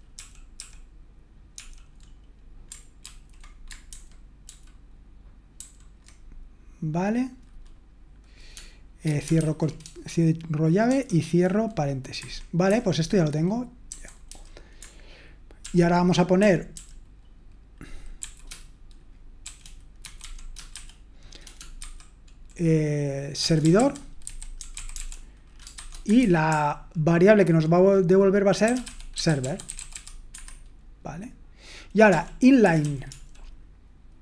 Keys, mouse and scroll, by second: 0.1 super+l, 0.6 super+l, 1.5 super+l, 3.0 ctrl+d, 3.9 super+h, 4.5 super+h, 11.9-13.1 typing, 16.2-16.9 typing, 20.0-20.7 typing, 21.8 typing, 23.2-26.7 typing, 29.0-30.4 typing, 33.1 typing.